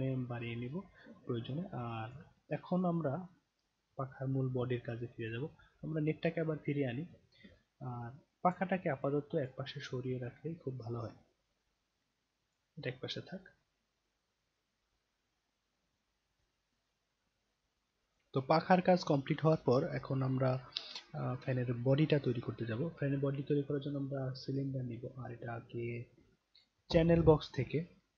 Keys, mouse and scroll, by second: 0.5-2.1 alt+drag, 2.6 scroll down 1, 5.2 click, 7.5-8.5 alt+drag, 9.4 click, 9.6 scroll down 1, 10.6-12.5 drag, 13.2 scroll down 1, 23.5 click, 26.5 click.